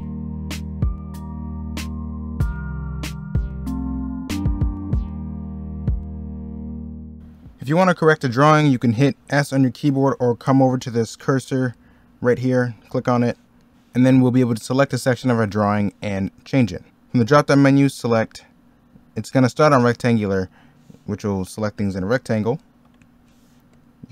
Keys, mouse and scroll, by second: 0.4 middle click, 2.3 ctrl+z, 2.6 ctrl+z, 2.9 ctrl+z, 3.3-5.1 typing, 3.9 ctrl+z, 6.7 middle click, 7.0 b, 7.1 middle click, 8.8 middle click, 16.6 middle click, 22.9 ctrl+z.